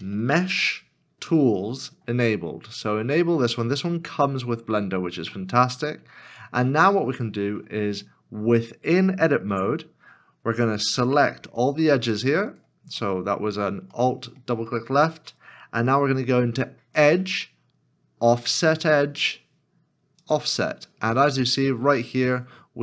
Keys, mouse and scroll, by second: 0.2 m, 0.4 e, 0.6 h, 9.5 Tab, 12.3 2, 12.4 alt+click, 13.9 middle click.